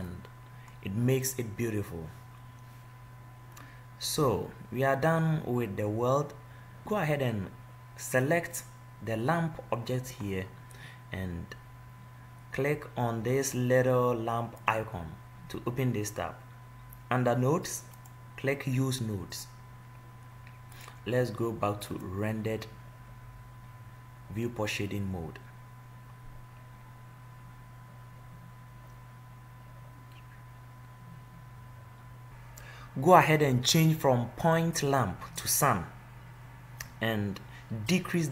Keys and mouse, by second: 3.4-5.9 middle drag, 7.0-8.4 middle drag, 8.4-10.2 drag, 10.2-12.8 middle drag, 14.9-16.9 drag, 18.2-28.0 drag, 32.3 ctrl+z.